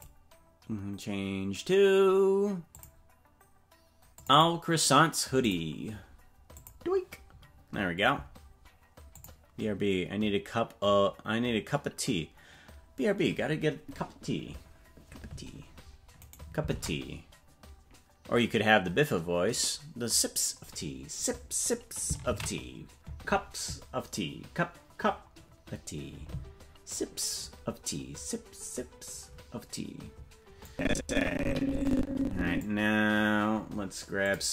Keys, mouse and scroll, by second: 16.3 right click, 16.7 ctrl+Tab, 24.7 ctrl+s, 30.6-32.6 drag, 34.2 click.